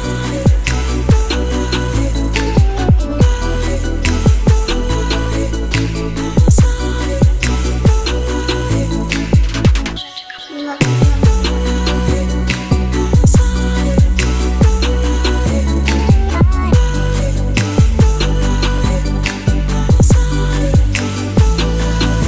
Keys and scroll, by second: 17.6-19.4 typing, 20.0 shift+Return, 20.6 Return.